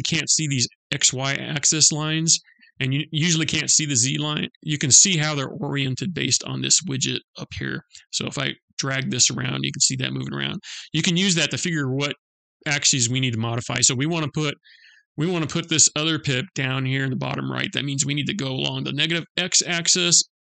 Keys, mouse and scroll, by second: 7.5 middle click, 13.2-14.0 scroll up 1, 14.0-17.3 scroll down 1.